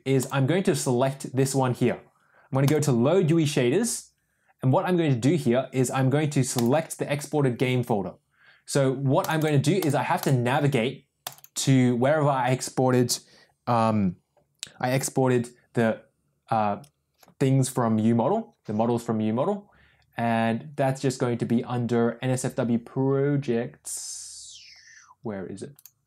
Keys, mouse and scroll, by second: 0.1 click, 2.6 click, 6.5 click.